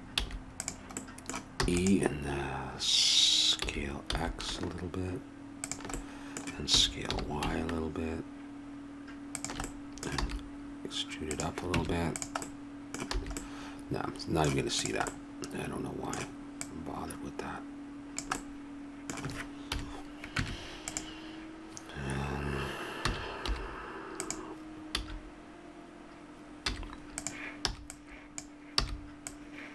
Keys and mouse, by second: 0.2 a, 1.0 right click, 1.6 e, 3.6 s, 6.7 s, 10.2 e, 11.7 Tab, 13.4 a, 14.8-17.4 drag, 19.7 KP_7, 20.3 Tab, 23.0 s, 24.9 a, 26.6 z, 27.7 b, 27.9-29.7 drag, 28.8 b.